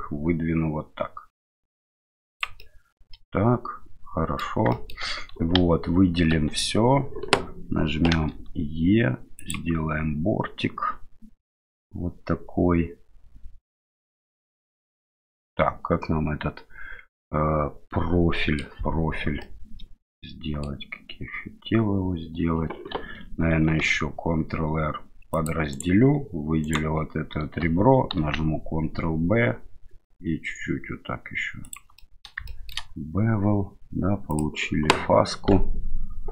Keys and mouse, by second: 2.6-4.4 middle drag, 4.7 shift+middle click, 5.6 a, 6.3 a, 8.1 e, 11.6-18.6 middle drag, 19.4-20.7 middle drag, 23.7 ctrl+r, 26.7 right click, 28.2 ctrl+b, 32.0 middle click, 32.5 shift+middle click.